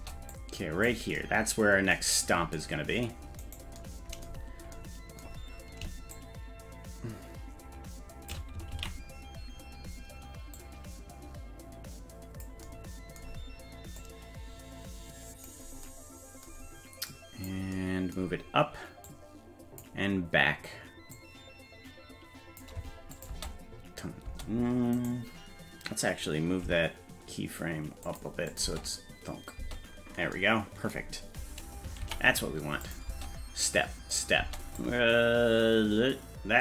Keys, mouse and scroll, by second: 0.3 click, 3.5 right click, 6.1-8.3 shift+drag, 9.2 ctrl+z, 10.5-12.5 drag, 14.0-15.5 drag, 17.1 click, 19.0 click, 21.1-22.6 drag, 23.1 click, 23.3 space, 24.2 space, 24.9 right click, 26.6 g, 28.5 click, 28.6 space, 29.6 space, 32.2 ctrl+s, 32.8 click, 33.1 space, 34.4 space, 34.8-36.6 drag.